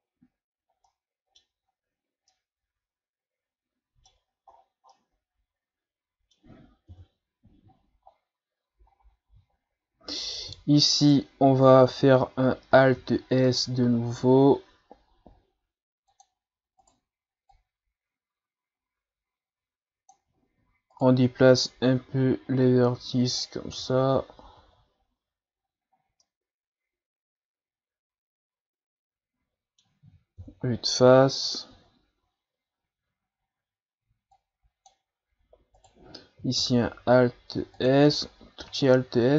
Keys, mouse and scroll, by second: 0.9-1.7 middle drag, 1.7-2.1 scroll up 4, 2.3-4.2 middle drag, 4.2-4.8 scroll down 6, 4.9-6.9 middle drag, 6.9 KP_1, 7.7-8.3 shift+scroll up 5, 8.3-8.8 scroll down 1, 8.9-9.8 scroll up 4, 9.8-10.1 scroll up 2, 10.1 right click, 10.4 Tab, 11.0 right click, 13.0 alt+s, 16.8 right click, 17.5-20.4 drag, 20.4-20.9 ctrl+scroll down 4, 20.9 right click, 21.5-23.8 drag, 23.8 Tab, 24.2 scroll down 2, 24.4 a, 25.6-26.0 scroll up 2, 26.0 scroll down 2, 26.2-29.2 middle drag, 30.4 KP_1, 31.3-31.7 scroll up 2, 31.7 Tab, 34.3-35.8 drag, 35.8 right click, 36.7 alt+s, 38.1 Tab, 38.7-39.3 scroll down 7.